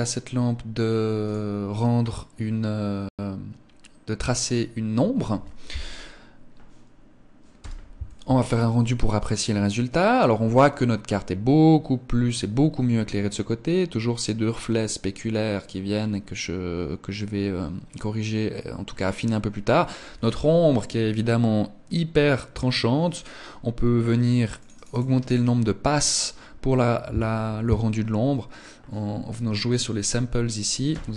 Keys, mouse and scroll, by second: 1.1 click.